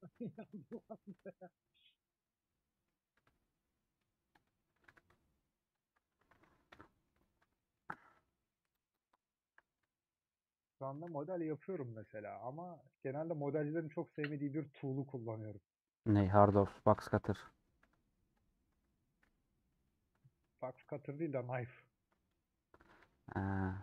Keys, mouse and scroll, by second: 0.7 alt+Left, 1.6 alt+Left, 2.4 middle click, 3.7 middle click, 4.9 3, 6.8 ;, 7.0-11.9 middle drag, 11.9 2, 13.0-13.3 scroll down 3, 13.3 scroll up 1, 13.5 a, 15.1-16.4 middle drag, 16.4 /, 17.0 Tab, 19.2 /, 19.6 middle click, 20.0 Tab, 20.1 middle click, 20.7 3, 20.7 click, 22.5-23.5 scroll down 2, 23.5 alt+click.